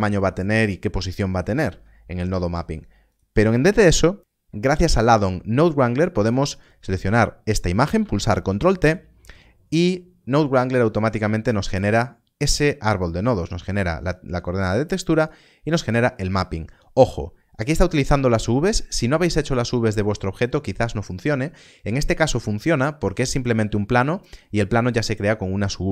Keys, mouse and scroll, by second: 3.0 shift+a, 3.9 middle click, 6.0 click, 8.7 ctrl+t, 11.7 ctrl+t, 16.1-16.9 scroll up 1.